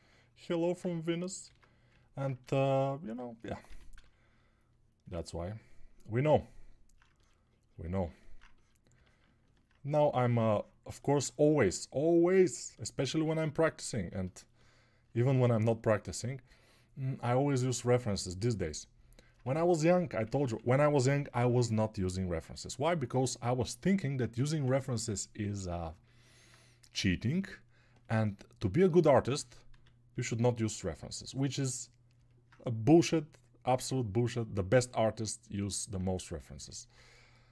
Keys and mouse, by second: 1.5 ctrl+Tab, 3.3-12.6 right drag, 3.7 g, 4.5-12.6 drag, 32.2-36.5 alt+right drag, 35.4-36.5 alt+drag, 35.4-36.5 alt+middle drag.